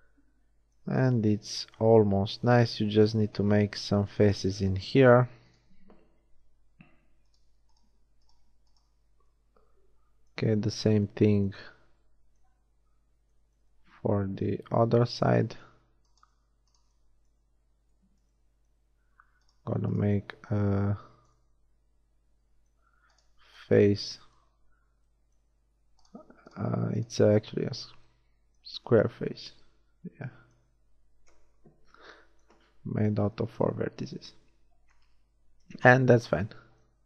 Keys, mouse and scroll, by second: 6.5 f, 9.1 f, 20.6 f, 21.0-22.9 middle drag, 27.3 shift+f, 28.6 a, 31.2 KP_1, 35.6 shift+KP_1, 36.1 z.